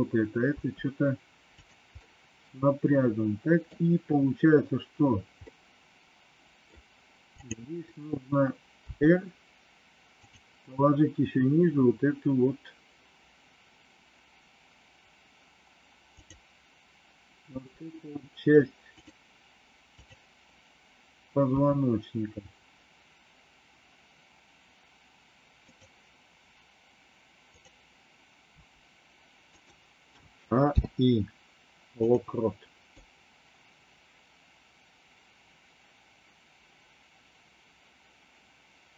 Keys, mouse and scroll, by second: 0.5 r, 2.0-6.6 middle drag, 8.7 r, 16.0 click, 17.5 r, 20.0 click, 21.5 r, 27.4 click, 28.4 r, 30.1 a, 30.6 i, 32.8-38.9 drag.